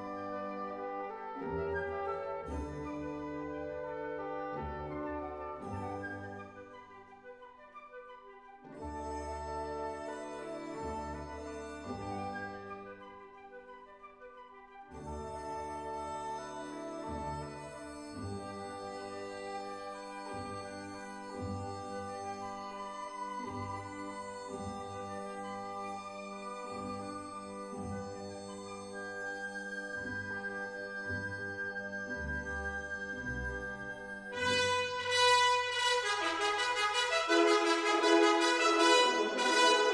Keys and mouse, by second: 0.9 z, 1.4 click, 2.7-3.9 drag, 4.8 e, 5.8 right click, 6.2 s, 6.9 click, 7.9-11.4 drag, 12.2 e, 13.3 z, 13.7 click, 14.9-16.4 drag, 18.3 e, 18.7 right click, 19.3 s, 19.9 click, 21.1-27.2 drag, 27.2 e, 27.2 z, 27.9 right click, 29.1 g, 29.2 z, 30.6 KP_7, 30.9 KP_Enter, 39.8 e.